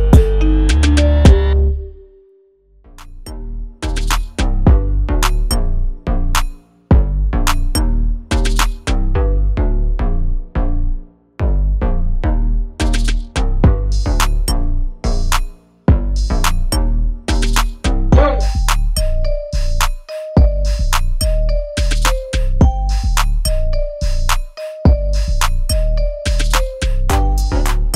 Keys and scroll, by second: 20.7 ctrl+d, 21.3 ctrl+alt+d.